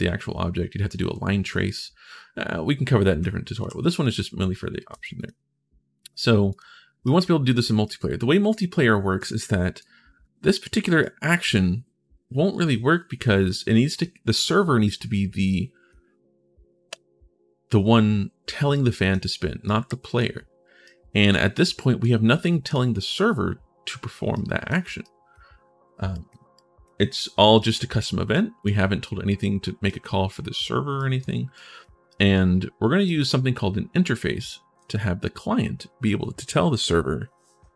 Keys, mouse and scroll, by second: 2.5-3.9 right drag, 3.4 w, 4.7 ctrl+shift+s, 4.9 right click, 6.2 right click, 6.8 right click, 7.6 right click, 9.0 right click, 10.8-12.8 right drag, 20.6 right click, 21.3 right click, 22.2 right click, 24.1 right click, 24.8 right click, 25.9 right click, 26.1 click, 27.3 click, 28.1 click, 29.6 click, 29.9 right click, 30.9 right click, 31.9 right click, 32.5 right click, 34.5 ctrl+shift+s.